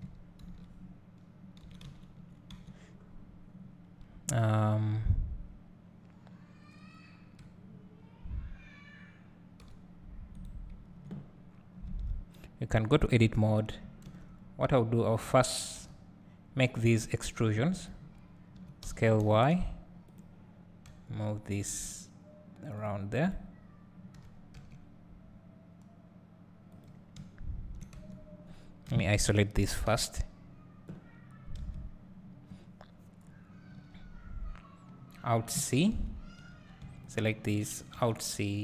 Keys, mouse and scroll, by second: 1.9 alt+c, 2.7 Tab, 3.2-7.8 scroll up 1, 9.6 r, 10.4 right click, 11.9 Tab, 12.9 click, 14.1 shift+d, 17.9 shift+click, 18.6 s, 20.9 g, 23.2 click, 24.2 g, 26.8 click, 27.2 `, 28.1 Tab, 28.9 KP_Divide, 29.9 KP_7, 33.2-33.7 scroll up 1, 33.7 Tab, 36.5 Tab, 37.0-38.6 drag.